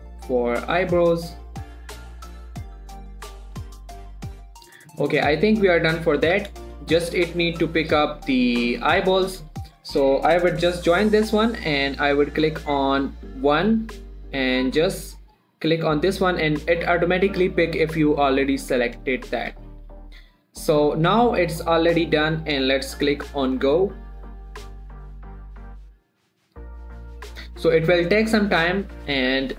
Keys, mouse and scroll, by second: 0.2 shift+middle click, 0.3 shift+scroll up 1, 0.5 g, 1.2 click, 1.9 g, 2.2 click, 2.7 g, 2.9 click, 3.0 click, 3.4 g, 3.8 click, 4.1-4.7 scroll down 2, 4.7 shift+middle click, 5.6-6.3 scroll down 2, 6.3-6.7 scroll down 1, 6.7 Tab, 7.1 shift+middle click, 7.5-8.7 scroll up 2, 8.7-9.1 scroll up 1, 9.1 click, 9.4 g, 9.6 right click, 10.0 shift+click, 10.9 ctrl+j, 12.2 click, 17.0-17.9 scroll up 2, 17.9-19.1 scroll down 2, 19.1-19.5 scroll down 1, 19.7-21.8 shift+middle drag, 23.9 click.